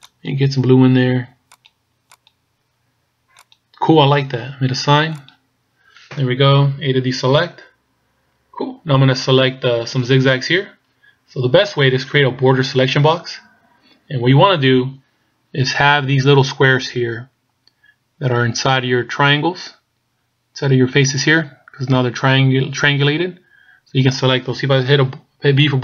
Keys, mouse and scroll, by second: 5.3 click, 6.9 a, 13.5-14.6 scroll up 4, 25.7 b.